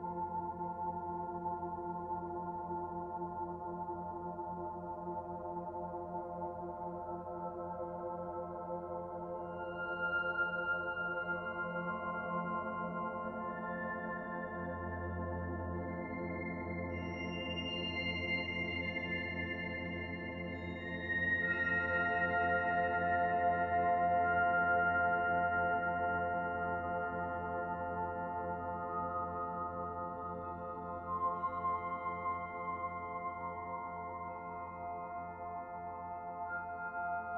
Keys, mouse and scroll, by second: 1.1-2.2 scroll up 1, 3.9 shift+middle click, 5.0 right click, 7.0 click, 9.6 middle click, 10.3 shift+middle click, 11.2 shift+right click, 12.8 shift+a, 17.3-17.7 scroll down 1, 17.7 middle click, 18.5-19.2 scroll up 2, 19.2 Tab, 19.2-20.3 scroll up 1, 21.2 m, 25.8-28.0 scroll up 2, 28.0 click, 28.0-28.9 scroll up 1, 29.2 click, 29.9-30.8 scroll down 2, 30.3 middle click, 31.0 shift+middle click, 31.7-32.2 scroll up 2, 32.3-32.9 scroll down 1, 34.8 e, 37.1 Tab.